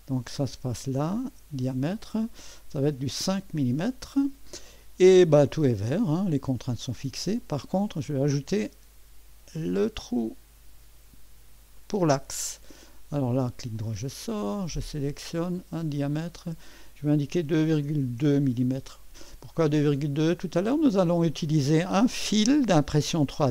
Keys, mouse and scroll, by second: 0.3 click, 1.2 click, 3.0 KP_5, 3.3 Return, 8.1 click, 9.6 click, 11.8 click, 12.8 right click, 14.8 click, 16.1 click, 17.2-18.7 typing, 20.0 middle click, 20.0 typing, 20.6-21.7 right drag.